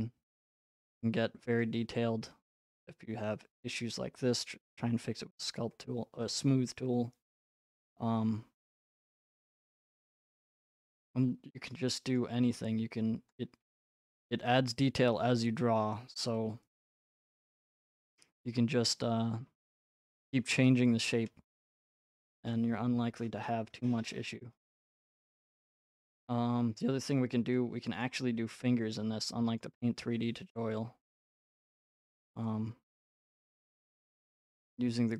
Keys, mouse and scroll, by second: 1.6 right click, 5.5 click, 7.5 right click, 7.8-9.5 scroll, 9.6-9.9 scroll, 10.8 click, 11.2-11.6 scroll, 12.2 right click, 13.3 ctrl+click, 17.5 alt+click, 20.6 click, 21.5 right click, 21.8-22.6 scroll, 23.6-24.0 scroll, 25.2 right click, 27.1 shift+middle click, 27.1-28.0 shift+scroll, 28.0 right click, 29.6 right click, 32.3 click, 33.1 right click, 33.3-33.9 scroll, 34.3-34.8 scroll.